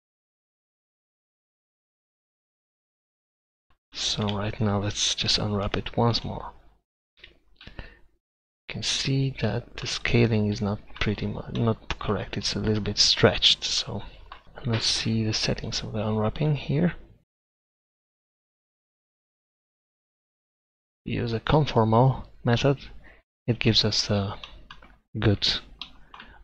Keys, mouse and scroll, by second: 4.4 Tab, 5.3 u, 7.2 Tab, 14.4 u, 15.0-16.9 drag, 18.9 click, 23.2 middle click, 25.3 Tab.